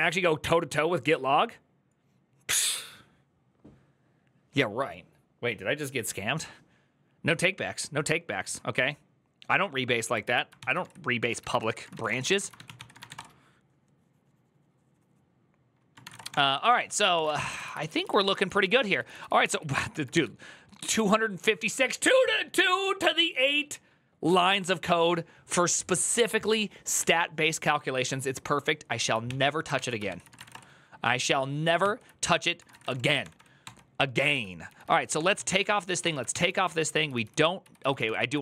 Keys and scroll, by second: 10.1 alt+{, 10.4 ctrl+c, 10.5 ctrl+c, 10.9 ctrl+a, 11.2-13.3 typing, 11.3 ctrl+c, 15.8-17.6 typing, 16.6 ctrl+d, 17.8 ctrl+u, 18.7 ctrl+u, 19.9 shift+g, 29.0 ctrl+n, 29.5 ctrl+s, 29.8 ctrl+c, 29.9-30.7 typing, 31.6 ctrl+t, 32.3 ctrl+c, 32.5 typing, 33.0 ctrl+d, 33.1 ctrl+d, 34.2-38.4 typing.